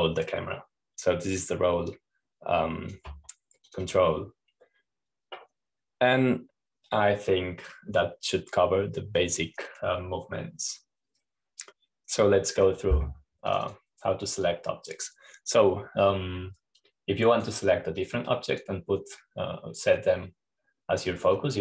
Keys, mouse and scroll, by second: 0.4-6.9 drag, 7.6-8.5 scroll down 1, 12.9-13.7 scroll down 1, 13.7-14.1 scroll down 1, 15.0-17.1 drag, 18.3-20.6 drag.